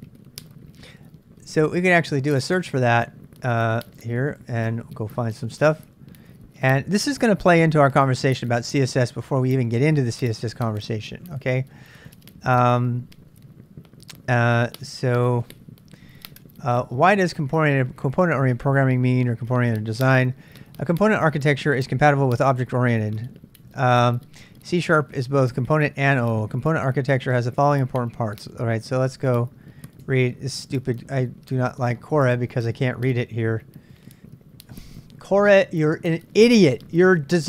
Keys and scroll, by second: 1.6 ctrl+[, 1.7-4.0 typing, 4.6 Return, 5.3 super+Tab, 5.5 super+Tab, 14.7 ctrl+n, 15.1 ctrl+n.